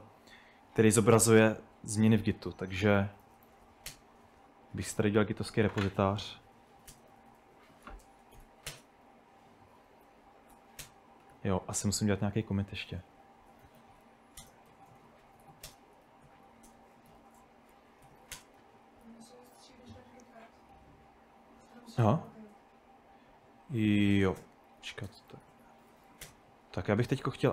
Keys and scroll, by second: 0.0-0.8 typing, 2.2 ctrl+n, 2.2-4.2 typing, 6.4-19.2 typing, 19.2 super+Tab, 24.0-26.6 typing.